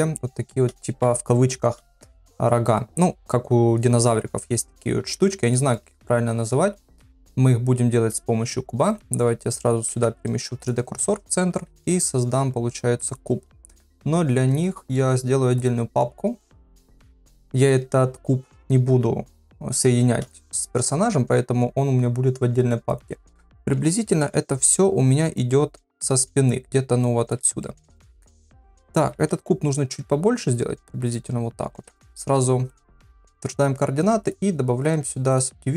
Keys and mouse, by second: 0.1 middle click, 5.5 shift+middle click, 8.8 click, 9.9 shift+s, 11.7 shift+a, 15.5 click, 16.4 click, 20.6 s, 23.6 KP_1, 24.2 KP_3, 25.4-26.5 drag, 27.0 click, 27.6 shift+middle click, 28.1 middle click, 29.1 s, 31.7 ctrl+a.